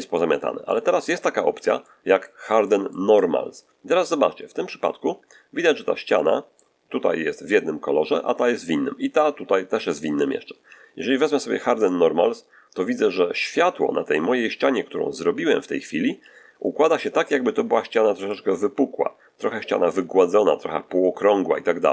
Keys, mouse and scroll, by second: 0.0 middle click, 0.9 middle click, 2.5 middle click, 3.0-6.6 middle drag, 11.7 click, 18.1-21.9 middle drag.